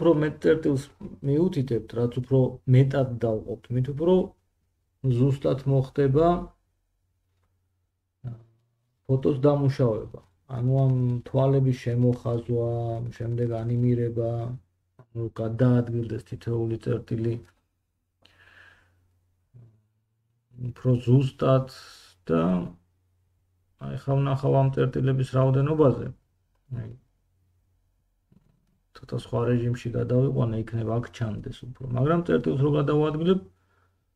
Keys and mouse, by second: 3.4 1, 11.8-23.7 middle drag, 23.6-34.1 drag, 23.6 right click, 30.0 middle click, 30.0 right click, 32.0 g.